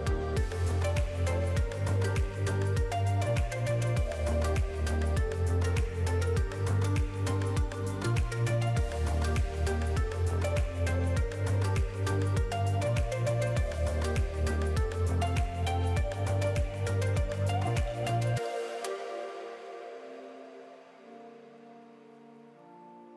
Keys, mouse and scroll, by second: 0.8 s, 2.3 alt+a, 2.5-3.0 scroll down 4, 2.9 Tab, 3.0 middle click, 4.5 scroll up 4, 4.7 middle click, 5.3-6.0 scroll down 4, 6.2-6.6 scroll down 8, 6.3 shift+middle click, 6.6 shift+middle click, 7.3 click, 8.1 KP_Decimal, 8.6-9.0 scroll down 10, 9.0 middle click, 9.7 click, 11.4 KP_Decimal, 11.7-12.1 scroll down 3, 12.0 middle click, 12.5 scroll up 2, 12.7 scroll down 1, 13.2 s, 15.0 click, 15.7 middle click, 16.4 click, 17.0 middle click, 18.0-18.7 scroll up 2, 18.2 middle click, 18.7 click, 19.3 middle click, 20.0 click, 20.8 scroll down 2, 21.0 alt+a, 21.2 middle click, 21.8 click, 22.1-22.5 scroll up 3, 22.3 middle click, 22.8 click.